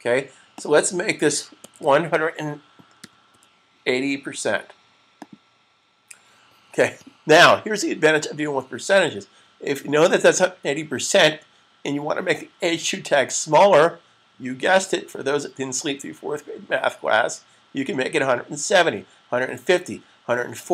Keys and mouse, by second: 0.4 click, 3.7-4.4 typing.